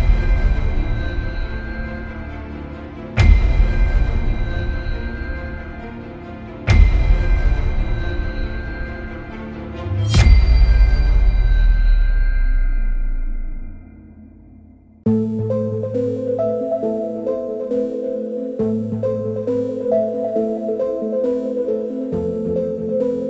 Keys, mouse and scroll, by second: 3.6 click, 7.6 shift+drag, 8.9-10.5 drag, 10.8 shift+middle click, 12.3 click, 13.7-14.0 shift+middle drag, 17.7-18.0 shift+middle drag, 19.7 click, 23.1-23.2 shift+middle drag.